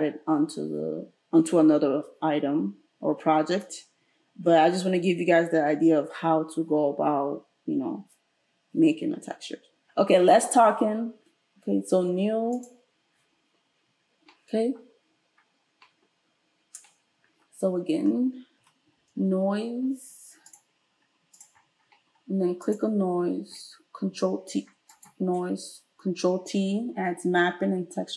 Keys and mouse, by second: 12.5-21.5 drag, 18.6 space, 22.7 click, 24.1 ctrl+t, 24.9 click, 26.1 ctrl+t.